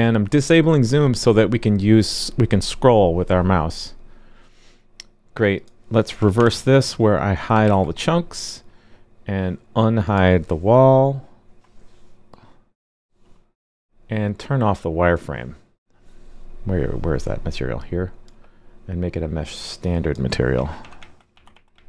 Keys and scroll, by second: 6.3 super+/, 7.6 super+s.